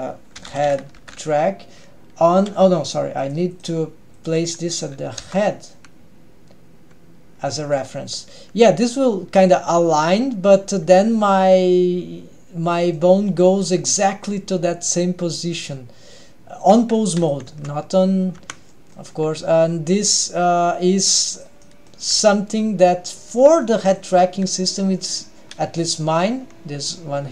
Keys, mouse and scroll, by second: 8.9-9.6 middle drag, 10.5 g, 13.0 middle click, 13.6 g, 17.6 Tab, 18.5 Tab, 18.8-19.1 middle drag, 19.4 g, 21.7 middle click, 22.2 g, 24.5 g.